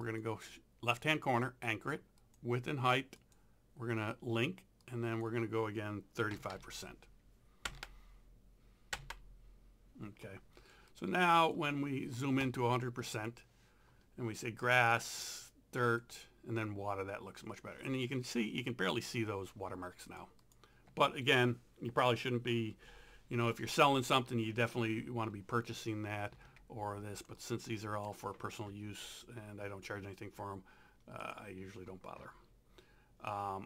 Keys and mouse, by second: 0.0 click, 2.2 click, 4.8 click, 6.1-7.0 typing, 7.7 KP_Enter, 10.9 click, 13.0 click, 20.1 click, 26.5 ctrl+0, 27.3 z, 27.4 click, 28.0 click, 31.2 click.